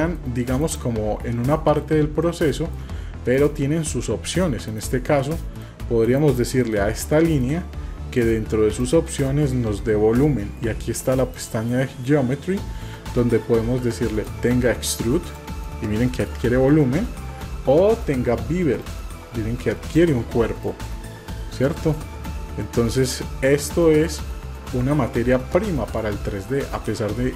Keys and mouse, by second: 1.6 drag, 2.3-2.8 shift+middle drag, 3.3 click, 5.3-5.7 middle drag, 6.0 KP_Divide, 6.7-7.5 middle drag, 8.9 click, 11.4 click, 14.3-15.4 drag, 15.7 middle click, 18.9-20.1 drag, 20.7 click, 20.7 typing, 22.0-22.3 middle drag, 22.9 middle click, 23.8 middle click, 24.4 typing, 25.2-26.0 middle drag, 26.4-27.3 middle drag.